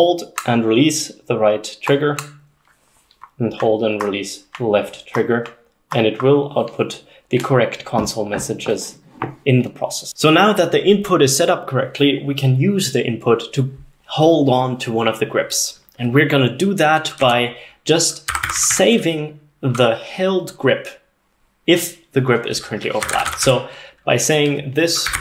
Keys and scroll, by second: 17.3-19.3 typing, 22.8-25.2 typing.